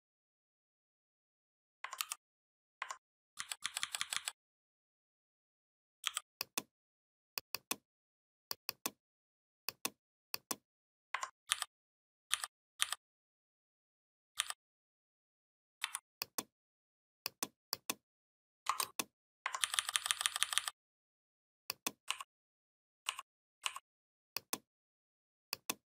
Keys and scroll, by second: 1.8 ctrl+g, 3.2 ctrl+], 5.9 i, 11.3 ctrl+[, 12.1 ctrl+[, 14.2 ctrl+[, 15.6 v, 19.4 ctrl+[.